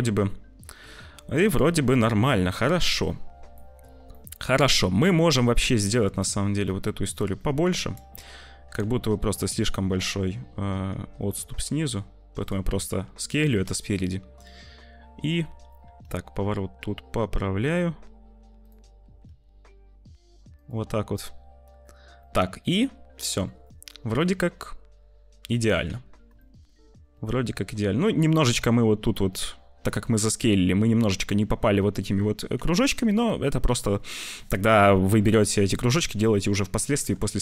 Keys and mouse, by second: 0.7 click, 1.4-2.9 drag, 3.4 click, 4.2 click, 4.8 click, 6.1 middle click, 8.1 middle click, 8.9 `, 10.8 s, 13.3 `, 14.5 shift+middle click, 15.9 r, 19.0 g, 21.2 middle click, 22.1-23.4 middle drag, 24.2-25.6 middle drag, 25.8 `, 26.4 shift+middle click, 27.1 shift+middle click, 32.7 shift+middle click, 36.9 g.